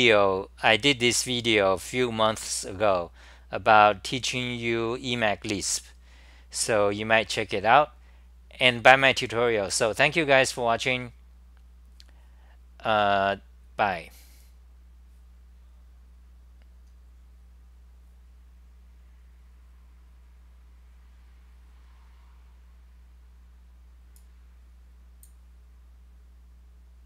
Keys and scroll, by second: 16.8-17.5 typing, 24.6-25.3 typing, 25.8 Delete.